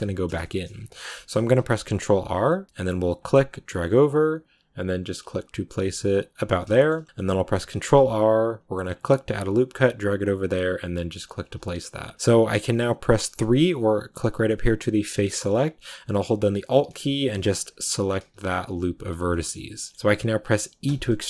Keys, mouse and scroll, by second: 0.5-1.0 scroll up 2, 1.0 shift+middle click, 1.4 ctrl+r, 6.6 shift+middle click, 6.8 scroll up 1, 7.7 ctrl+r, 12.1 middle click, 13.0 3, 14.1 click, 14.9-16.6 shift+middle drag, 16.6-19.2 alt+right drag, 19.2-20.8 middle drag, 20.7 e.